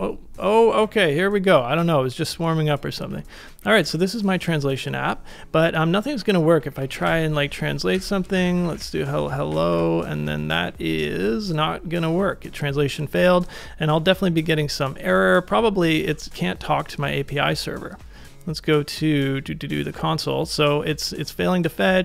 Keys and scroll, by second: 3.3 super+=, 3.6 super+=, 3.8 super+=, 6.5-10.2 typing, 15.8 alt+super+i.